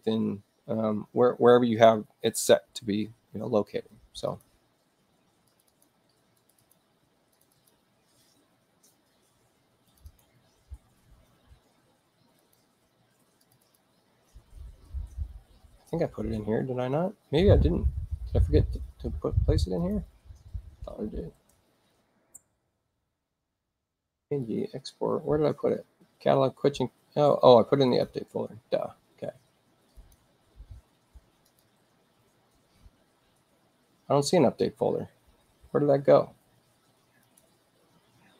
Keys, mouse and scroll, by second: 4.3 click, 5.5 click, 5.7 click, 6.4 click, 6.6 click, 7.3 click, 7.5 click, 9.9 click, 10.1 click, 12.4 click, 13.4 click, 13.6 click, 14.7-15.8 scroll down 2, 15.8-16.9 scroll up 2, 16.9-18.2 scroll down 2, 19.8 click, 22.0 ctrl+alt+shift+w, 24.4 click, 27.9 click, 30.0 click, 31.5 click, 33.3-37.2 scroll down 2, 37.2 click.